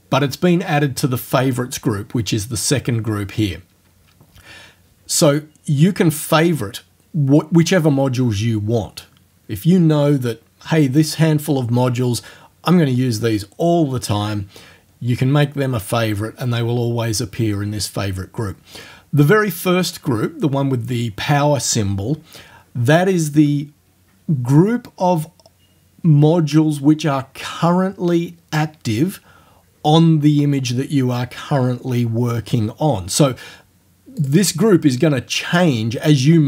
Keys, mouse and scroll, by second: 34.2 click.